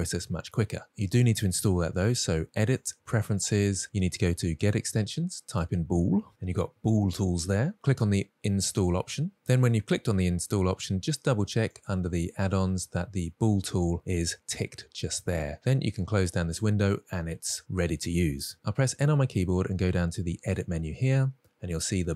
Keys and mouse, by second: 2.3-3.5 drag, 18.5 n, 20.6 click.